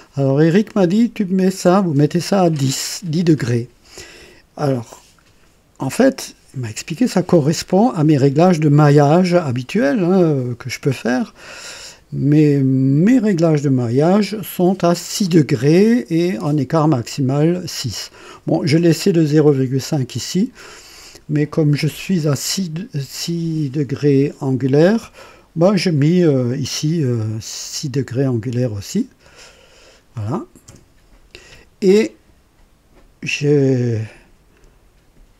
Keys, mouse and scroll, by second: 0.4 click, 29.4 KP_6, 30.7 KP_Enter, 34.0-34.7 drag.